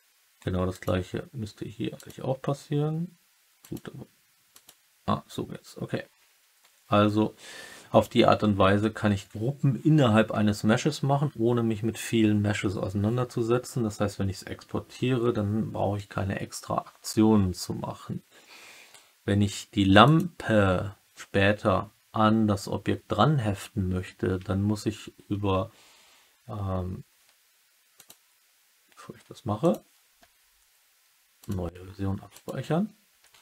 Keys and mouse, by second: 0.6-1.3 typing, 0.6 click, 3.5 click, 4.5 click, 20.0 click, 27.9-29.7 drag.